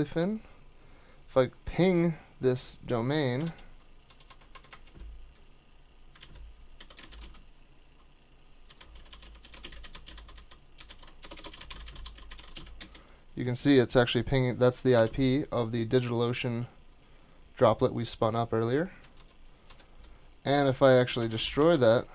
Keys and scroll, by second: 3.4 super+Tab, 4.0 super+Tab, 4.3 super+Tab, 6.2 super+t, 6.5-13.3 typing, 14.9 ctrl+c, 19.2 super+Tab, 19.7 super+Tab, 20.8-22.1 typing.